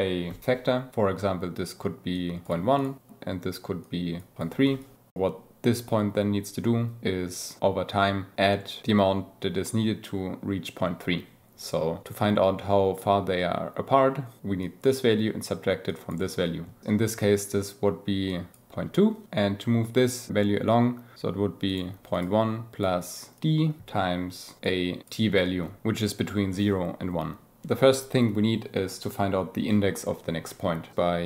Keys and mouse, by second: 2.7 click, 4.6 click, 4.7 ctrl+z, 14.5 click, 15.8 click, 17.9 click, 18.1 click, 18.6 click, 21.2 ctrl+z, 21.5 click, 21.8 click, 22.5 click, 22.7 click, 23.3 click, 24.1 click, 24.4 click, 24.5 click, 25.1 click, 30.9 shift+a.